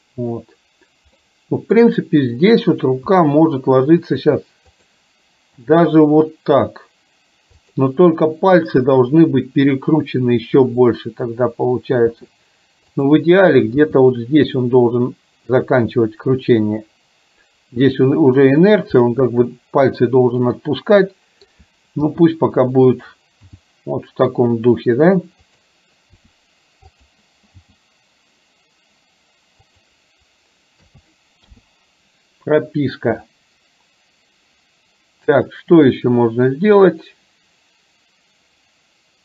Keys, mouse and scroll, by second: 1.3-1.8 middle drag, 3.2 r, 5.8 g, 12.1 r, 13.8 g, 19.1-21.6 middle drag, 22.2 r, 23.6 g, 26.1 r, 27.8 g, 30.9 a, 31.6 i, 33.2-35.3 middle drag, 36.8-39.2 drag.